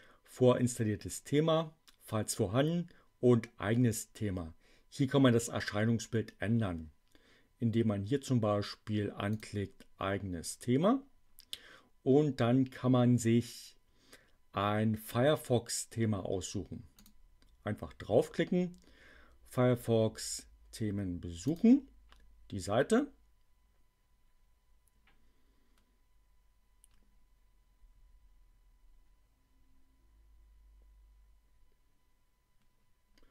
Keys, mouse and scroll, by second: 9.2 click, 16.8 click, 21.4 click.